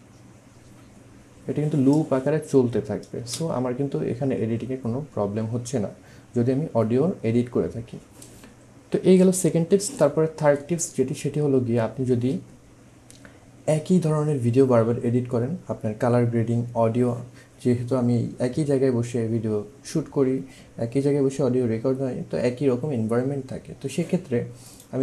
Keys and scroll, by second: 3.2 space.